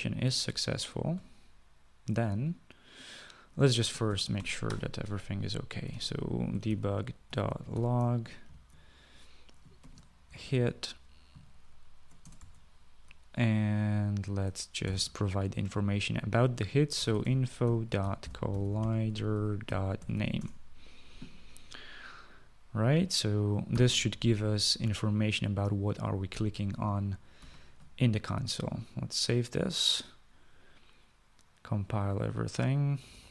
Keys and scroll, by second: 4.2 Tab, 4.4 Tab, 6.2-8.8 typing, 10.1-10.6 typing, 12.2-12.9 typing, 13.9 Right, 17.1-20.9 typing, 24.0 ;, 27.7 ctrl+s.